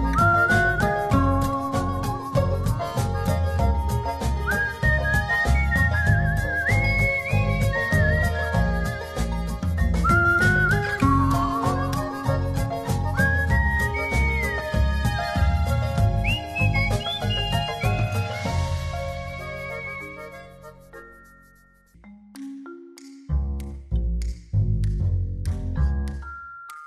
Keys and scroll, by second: 1.7 super+t, 5.0 v, 5.6 shift+v, 16.2 shift+Left, 18.7 e.